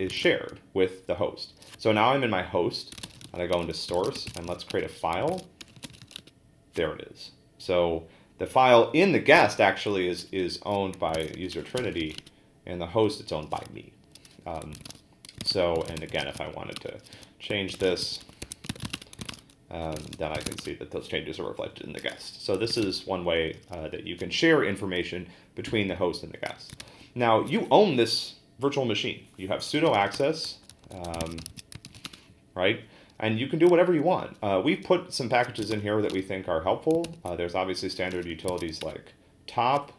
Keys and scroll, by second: 0.1 ctrl+a, 0.2 n, 2.7-6.5 typing, 10.9-12.5 typing, 14.5-20.9 typing, 22.7 ctrl+a, 22.8 n, 26.8 ctrl+d, 29.5-32.5 typing, 35.3-36.2 typing, 37.0 ctrl+c, 37.9-39.0 typing.